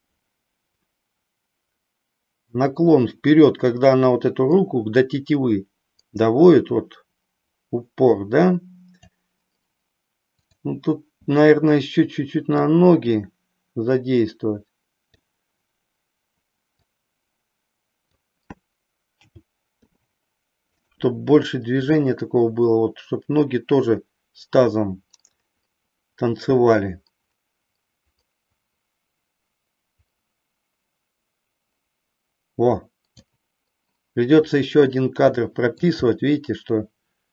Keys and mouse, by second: 10.4 click, 12.6-15.2 drag, 16.7-18.2 drag, 19.7 a, 19.7 i, 21.8-33.2 drag, 35.3 shift+middle click.